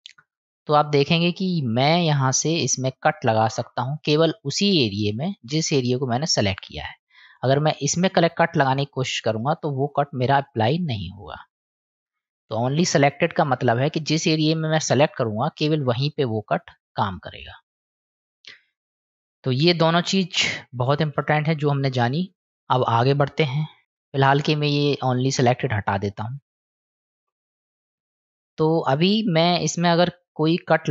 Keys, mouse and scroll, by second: 0.2 middle click, 2.2-21.4 drag, 25.7 click, 26.8 middle click, 28.3 middle click, 30.4-30.9 drag.